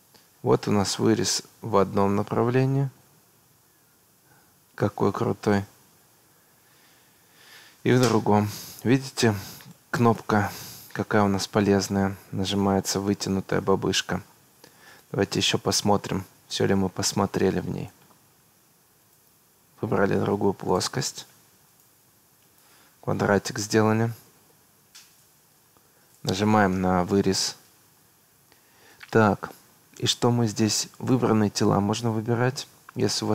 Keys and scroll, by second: 24.3 Escape.